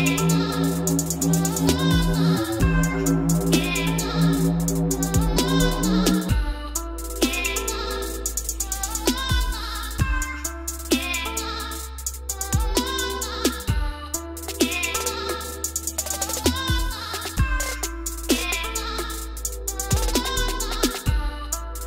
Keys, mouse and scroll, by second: 0.7 scroll, 0.7 q, 1.9 ctrl+Up, 3.4 click, 4.0-4.5 scroll, 6.6 click, 8.7 click, 9.6-10.4 typing, 11.7-12.4 scroll, 12.5 scroll down 11, 12.5-13.1 scroll down 4, 13.2-14.0 scroll up 12, 14.1 scroll, 14.4 click, 16.3 click, 16.4 click, 16.6 click, 17.2 d, 17.5-17.9 scroll down 11, 17.9 scroll up 1, 18.0 scroll down 1, 18.2 scroll, 18.5 scroll up 1, 18.6-20.0 scroll, 20.0 o, 21.6 click.